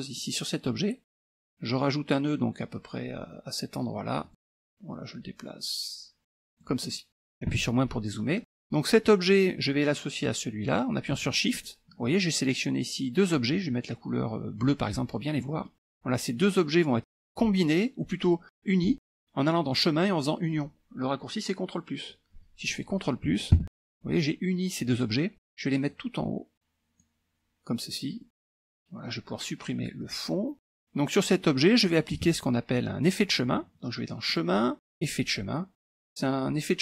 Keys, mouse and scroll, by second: 0.2 click, 4.3-6.8 drag, 7.6 KP_Subtract, 8.2 middle click, 11.6 shift+click, 14.7 click, 15.4 middle click, 19.7 click, 22.7 click, 23.6 ctrl+KP_Add, 25.9-27.4 drag, 28.3-28.7 scroll down 1, 30.1 click, 32.2 KP_Subtract, 34.3 click, 35.0 click, 36.2 click.